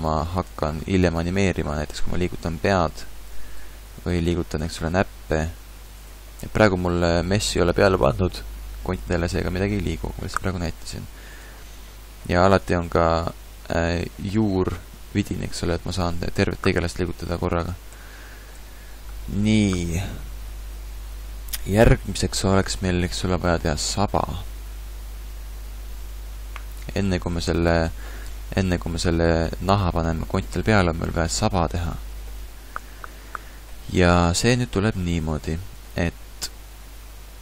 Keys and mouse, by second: 0.6 ctrl+Tab, 1.4 r, 5.0 g, 14.0 g, 19.0 a, 28.4-33.0 middle drag.